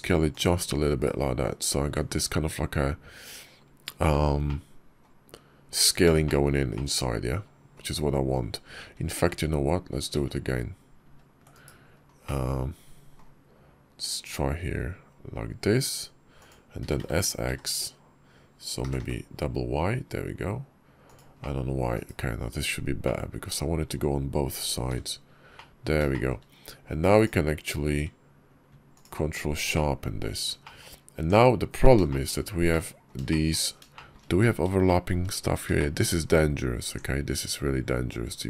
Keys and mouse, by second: 0.8 /, 1.7 Tab, 3.9 h, 4.3-4.9 drag, 6.1 shift+middle click, 6.6-7.6 drag, 8.7 ctrl+z, 9.3 ctrl+z, 10.0 ctrl+z, 10.9 ctrl+z, 11.4 /, 12.1 click, 14.0 s, 16.6 s, 21.2 click, 21.8 /, 22.3 Tab, 22.9 click, 24.7 h, 25.4 click, 26.0 shift+click, 27.6 q, 29.6 click, 30.5 shift+click, 31.0 Tab, 31.9 shift+click, 32.1 shift+middle click, 32.6 click, 33.1 shift+click, 33.8 shift+click, 34.7 shift+middle click, 35.6 shift+middle click, 36.7 Tab.